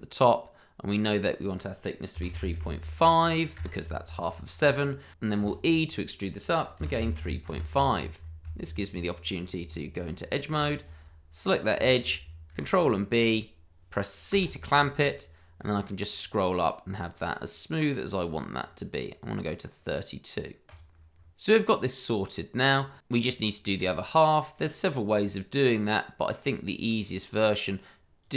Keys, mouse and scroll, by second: 2.1 KP_3, 2.3 KP_Decimal, 2.5 KP_5, 3.5 KP_Enter, 5.4 e, 6.7 KP_3, 6.9 KP_Decimal, 7.4 KP_Enter, 9.1 click, 9.7 Tab, 10.7 alt+click, 12.6 ctrl+b, 14.4 c, 15.5-16.2 scroll up 1, 19.7 scroll down 1, 20.6 click, 21.1 scroll down 1, 21.9 middle click, 23.9 scroll up 1, 24.3 shift+middle click, 24.6-25.2 scroll down 1, 25.7 click, 26.1 scroll up 1, 26.9 scroll down 1, 27.2 click, 27.5-28.3 scroll down 1.